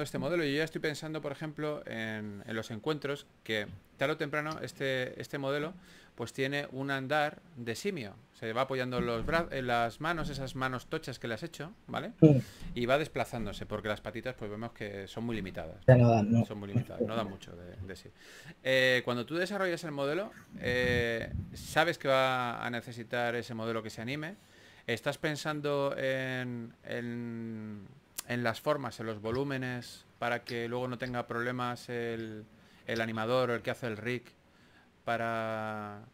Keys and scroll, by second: 0.0-0.4 typing, 4.6-5.8 typing, 8.7 s, 12.5-13.6 typing, 16.3-17.0 typing, 19.0 4, 24.5-25.3 typing, 26.0 super+z, 32.1 s, 34.4-36.1 typing.